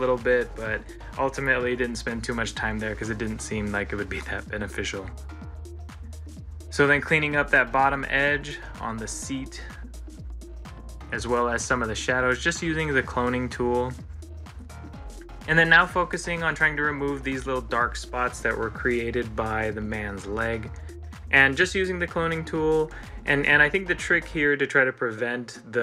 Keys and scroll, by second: 0.1 ctrl+z, 3.6 ctrl+c, 3.8 ctrl+l, 6.7 ctrl+z, 9.8 ctrl+z, 10.8 ctrl+z, 14.6 ctrl+z, 15.3 ctrl+z.